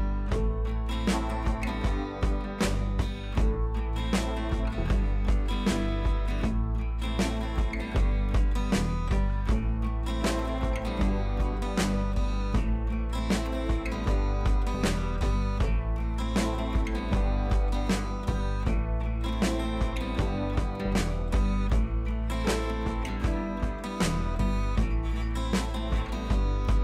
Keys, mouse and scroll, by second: 0.7 scroll up 1, 2.9 t, 4.6-8.7 drag, 17.3 scroll down 1, 17.6 scroll up 1, 17.8 t, 18.3 click, 19.0 alt+Tab, 19.4 click, 20.3 click, 21.0 ctrl+c, 21.7 ctrl+v, 22.3 ctrl+a, 23.6 click.